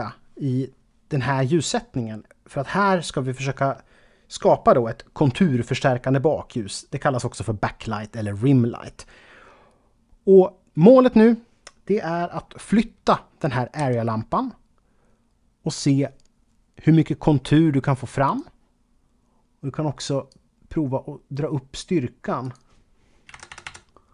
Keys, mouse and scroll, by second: 13.8 g, 18.3 click, 20.3 click, 22.4 click, 23.3 KP_0.